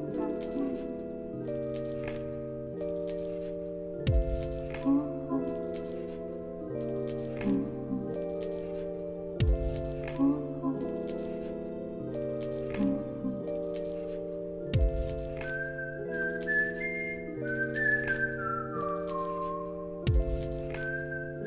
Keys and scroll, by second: 1.4 ctrl+s, 3.0 ctrl+s, 7.5 Escape, 10.7 Return, 12.7-14.1 typing, 15.8 End, 16.0 s, 16.1 Return, 16.8 ctrl+s, 17.5 ctrl+space, 17.7-19.0 typing.